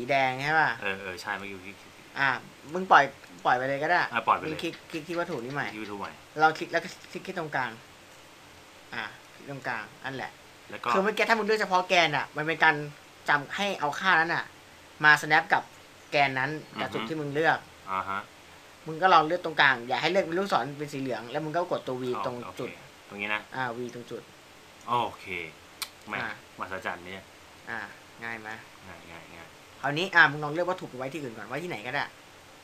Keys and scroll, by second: 11.8 v, 23.0 v.